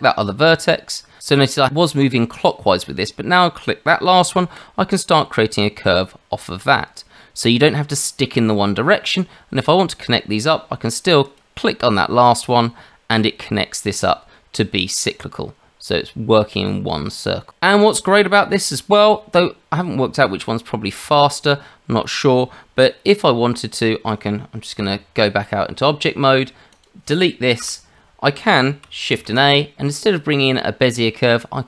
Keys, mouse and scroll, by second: 4.5 click, 11.2 click, 24.9 Tab, 26.7 click, 27.6 Delete, 29.1 shift+a.